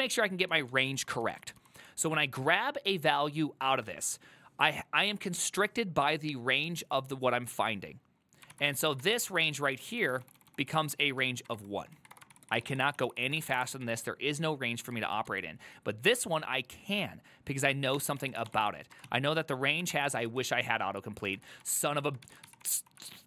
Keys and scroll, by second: 0.0-1.1 typing, 8.8 ctrl+c, 8.9-12.2 typing, 12.4 ctrl+c, 12.6 ctrl+c, 12.6 ctrl+c, 12.8 ctrl+c, 13.3-15.4 typing, 17.8-23.2 typing.